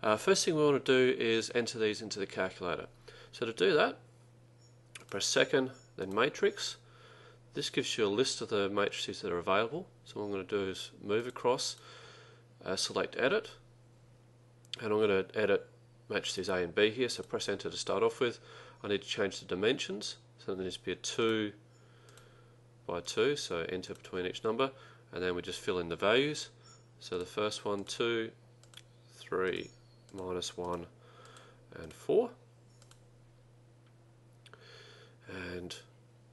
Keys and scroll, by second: 11.3 Right, 11.8 Right, 17.3 Return, 21.4 2, 22.2 Return, 23.1 2, 24.0 Return, 27.2 2, 28.5-29.2 typing, 29.6 Return, 30.7 1, 31.4 Return, 32.0 4, 33.0 Return.